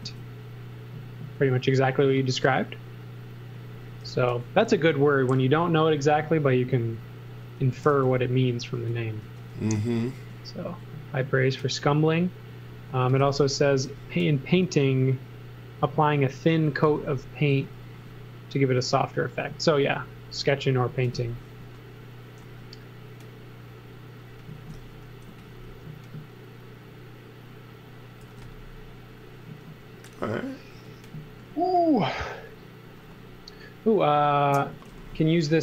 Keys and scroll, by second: 4.0 b, 7.4-10.2 typing, 12.7-13.8 typing, 14.8 b, 16.4-17.9 typing, 20.8-22.4 typing, 24.3-25.7 typing, 28.0-31.4 typing, 34.5-35.6 typing.